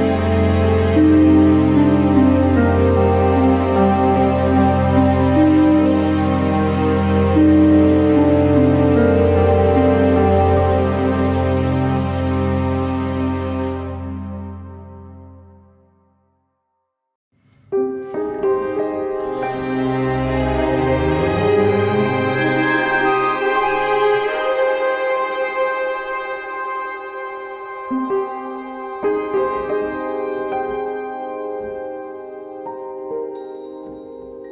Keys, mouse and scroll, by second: 0.2 Return, 1.2 scroll, 3.1 click, 3.9-4.4 scroll, 5.5 click, 6.3 1, 6.7 Return, 7.3 KP_1, 7.4 middle click, 8.2 scroll, 9.2 alt+middle click, 10.7 click, 11.6 alt+middle click, 13.6 click, 13.9-15.6 typing, 17.0 alt+middle click, 18.0 click, 18.7 typing, 19.1 Return, 19.9 alt+middle click, 21.6 alt+middle click, 22.6 click, 23.7 click, 24.4 alt+middle click, 25.4 alt+scroll, 26.2 click, 26.4 alt+middle click, 26.6-27.5 typing, 28.8 click, 29.6 middle click, 31.6 alt+middle click, 33.9-34.5 drag.